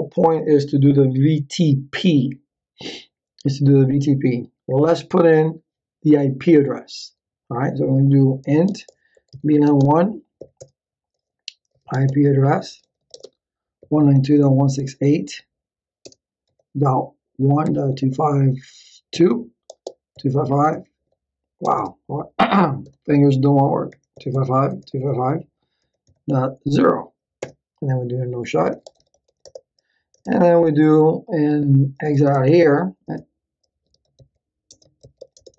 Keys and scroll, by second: 8.1-10.4 typing, 10.6 Return, 11.6-21.6 typing, 22.8-26.1 typing, 27.4 Return, 28.2-29.8 typing, 31.7-35.5 typing, 33.0 Return.